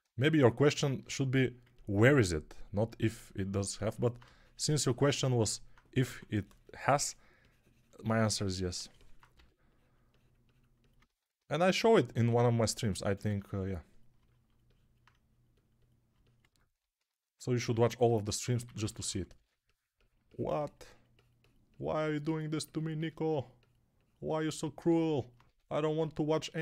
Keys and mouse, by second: 6.0 6, 9.2 g, 17.8-19.3 typing, 24.9-26.6 alt+drag, 24.9-26.6 alt+middle drag, 24.9-26.6 alt+right drag, 25.3 1.